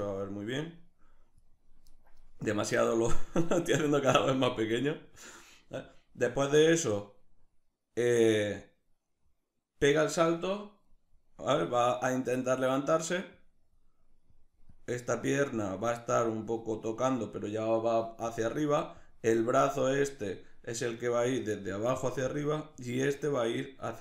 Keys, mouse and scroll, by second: 12.9-24.0 drag.